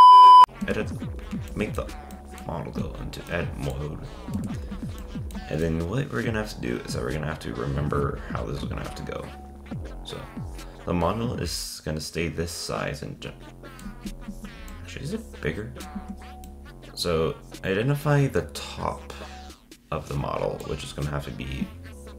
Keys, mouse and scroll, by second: 0.4 click, 0.7 Tab, 1.5-3.9 shift+middle drag, 3.9-4.3 scroll down 4, 4.3 Tab, 5.0-8.6 shift+middle drag, 14.1 z, 14.7-16.0 middle drag, 16.0 Tab, 16.5-16.8 middle drag.